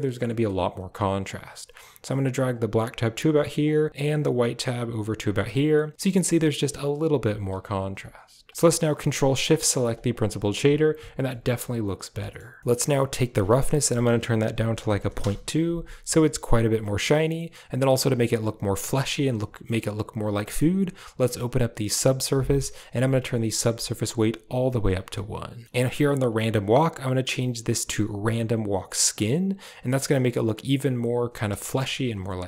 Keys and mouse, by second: 1.1-1.9 drag, 2.4 click, 3.7 click, 4.1-5.1 drag, 5.4 click, 5.9 m, 6.0 m, 6.7 m, 6.9 m, 7.9 click, 8.4 click, 9.5 ctrl+shift+click, 9.8 click, 11.3 shift+middle click, 12.1 middle click, 12.6 middle click, 13.2-15.1 drag, 16.7 middle click, 17.3 middle click, 19.5 middle click, 20.3 middle click, 21.8 click, 23.7 click, 25.5 middle click, 26.2-29.1 drag, 31.5 shift+middle click.